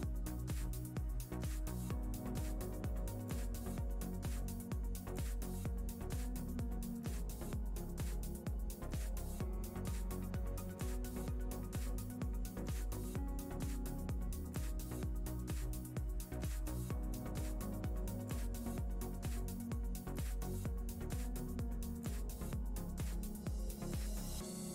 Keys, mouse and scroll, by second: 0.2 click, 1.5 KP_0, 3.4 ctrl+middle click, 4.0 shift+middle click, 5.5 shift+a, 11.6 click, 13.1 shift+middle click, 13.9 ctrl+middle click, 14.7 ctrl+middle click, 15.6 click, 20.3 click.